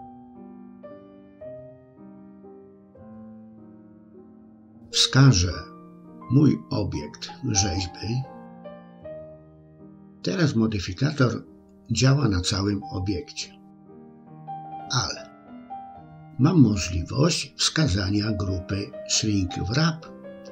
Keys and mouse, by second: 4.2 click, 11.0-12.0 middle drag, 14.1 middle click, 17.6-20.5 drag.